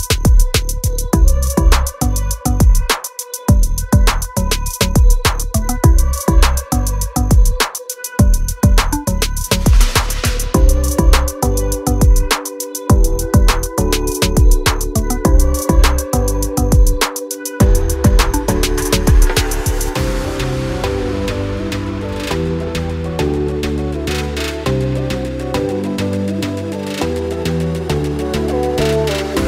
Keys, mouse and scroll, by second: 2.2 click, 3.4 click, 4.3 click, 6.4 click, 6.9 double click, 15.7 scroll down 1, 21.8 scroll down 1, 22.1 scroll up 1, 22.6 scroll down 1, 25.4 click, 26.3 click, 28.0 click, 29.2 click.